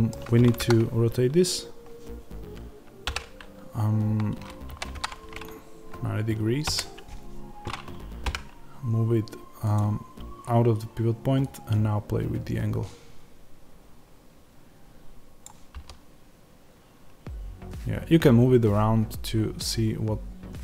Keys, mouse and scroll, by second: 0.5 KP_1, 3.0 r, 6.7 KP_1, 8.1 g, 9.6 click, 15.3-19.6 drag, 15.6 g.